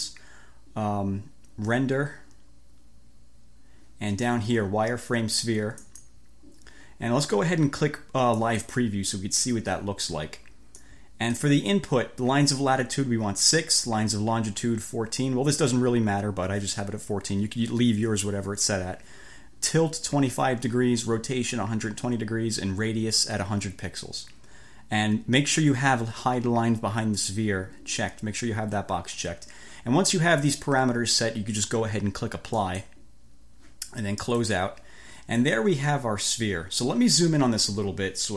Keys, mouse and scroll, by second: 5.8 click, 8.4 click, 10.8-11.6 drag, 32.6 click, 34.4 click, 35.4 click.